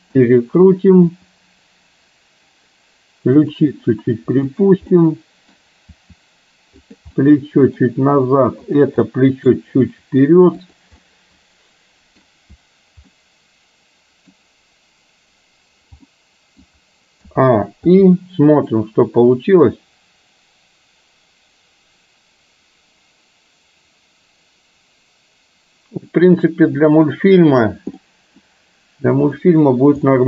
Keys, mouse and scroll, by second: 1.1 r, 5.0-5.6 middle drag, 5.9 r, 7.1-7.9 middle drag, 8.8 drag, 9.1-9.5 middle drag, 9.9 r, 11.1-12.8 middle drag, 13.3-14.4 middle drag, 16.1-16.8 middle drag, 17.3 a, 18.0 i, 19.4-27.8 drag, 28.0-28.5 middle drag, 29.3 click, 30.1-30.2 middle drag.